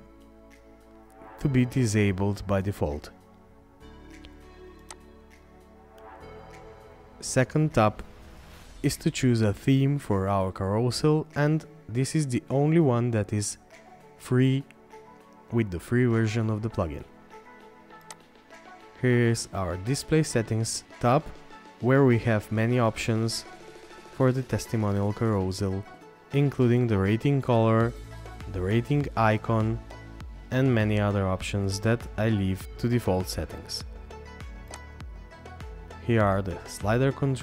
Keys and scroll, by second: 24.9-25.9 scroll down 1, 30.2-31.3 scroll down 1, 31.3-32.6 scroll up 1.